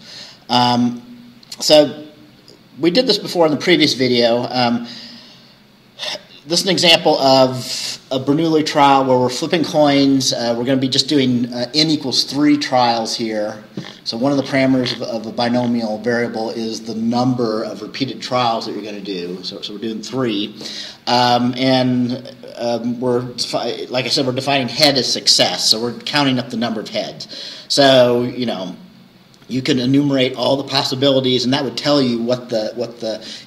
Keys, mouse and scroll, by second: 7.4 scroll up 2.